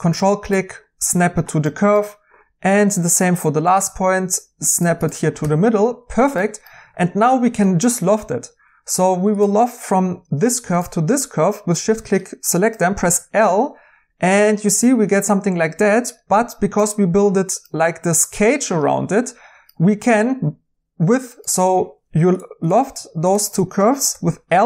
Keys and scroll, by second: 5.4 2, 21.8 Escape, 24.1 i.